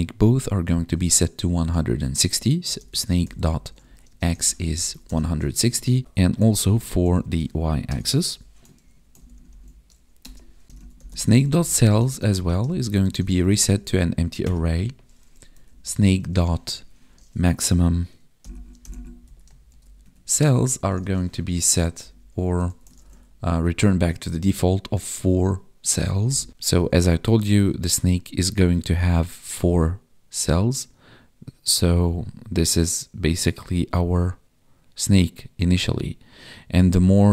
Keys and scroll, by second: 4.0 space, 4.2 space, 6.0 alt+shift+Down, 6.5 ctrl+Left, 7.0 Left, 8.7 ctrl+s, 9.0 ctrl+Right, 12.1 space, 12.4 space, 12.9 ctrl+s, 13.3 Right, 16.7 Tab, 20.0 Tab, 20.5 space, 20.9 space, 23.0 ctrl+s, 26.5 Tab, 26.9 Tab.